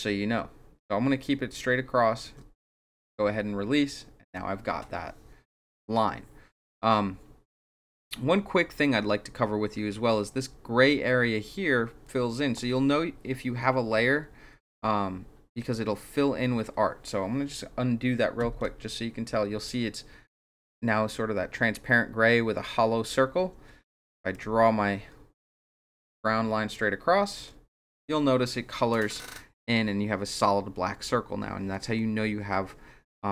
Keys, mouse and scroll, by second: 24.3-27.4 shift+drag.